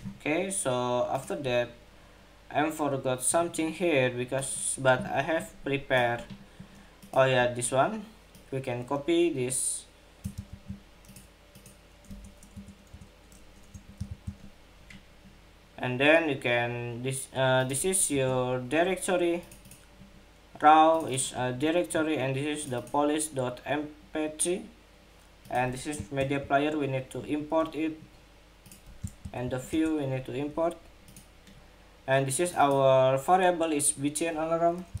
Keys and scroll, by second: 10.0 super+c, 13.8 super+v, 25.9 alt+Return, 28.9 alt+Return.